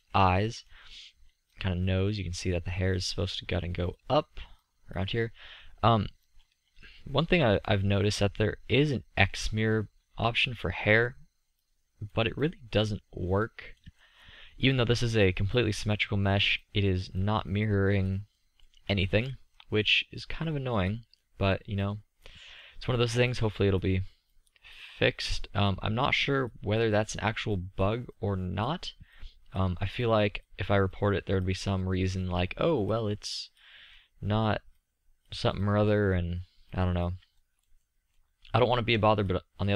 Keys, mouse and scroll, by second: 1.9-2.8 drag, 3.4-6.6 drag, 7.9 middle click, 8.5 middle click, 11.0 middle click, 14.2-14.8 middle drag, 15.1-16.9 middle drag, 18.8 drag, 19.0-19.5 middle drag, 19.5 click, 19.6 middle click, 19.9-20.3 middle drag, 23.2 drag, 32.4 middle click, 34.4-36.7 drag, 37.8 middle click, 37.9 click, 38.0 middle click, 38.3-39.7 drag.